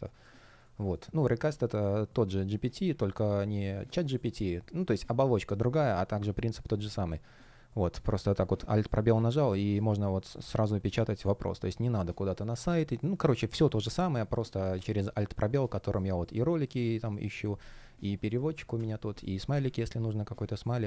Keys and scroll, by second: 8.3 super+space, 14.6 super+space, 18.4 Escape, 19.5 super+space.